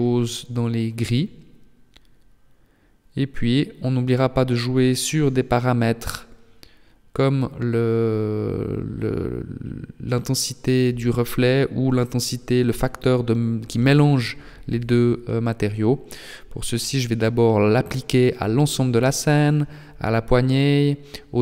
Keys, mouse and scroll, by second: 6.6 right click, 8.2 click, 9.7 click, 11.3 right click, 12.7 click, 15.3-15.7 scroll up 1, 17.8-18.2 scroll up 1.